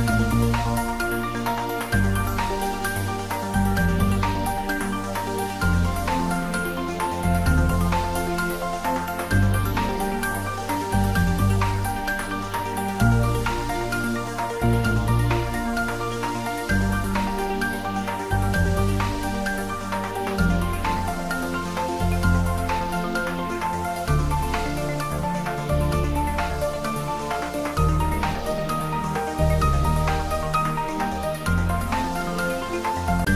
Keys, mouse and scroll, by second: 1.4 middle click, 2.1 Tab, 3.3 ctrl+r, 8.8 click, 12.1 ctrl+r, 14.3 click, 18.9 click, 19.6 ctrl+z, 21.4 ctrl+r, 22.9 click, 24.1 middle click, 25.3 ctrl+r, 26.3 click.